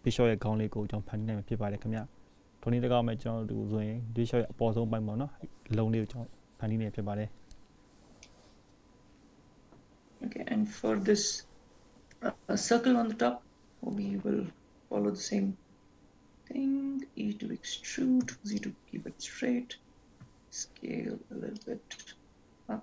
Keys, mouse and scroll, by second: 6.3-7.0 scroll up 1, 7.0-7.8 scroll down 3, 7.8 scroll down 1, 8.0-8.5 scroll up 1, 9.0 shift+middle click, 10.2-11.0 scroll up 4, 11.0 scroll down 2, 14.5 e, 21.8 s.